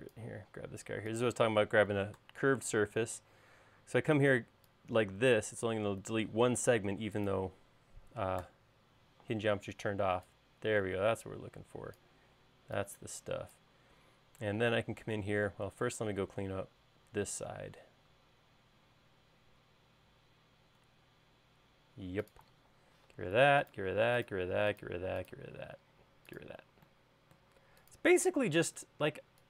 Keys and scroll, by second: 0.8 space, 2.5 BackSpace, 3.1 e, 6.8 space, 8.7 BackSpace, 9.8 e, 15.9 space, 23.4 BackSpace, 24.1 BackSpace, 24.6 BackSpace, 25.7 BackSpace, 26.7 BackSpace, 28.4 BackSpace.